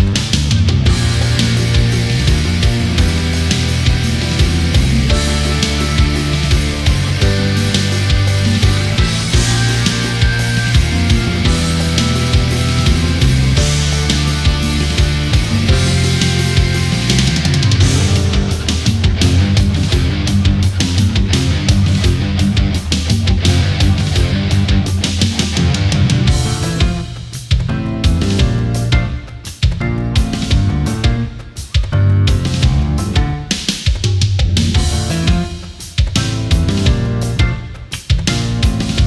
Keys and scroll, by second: 3.9 ctrl+z, 28.3 ctrl+-, 31.2 ctrl+=.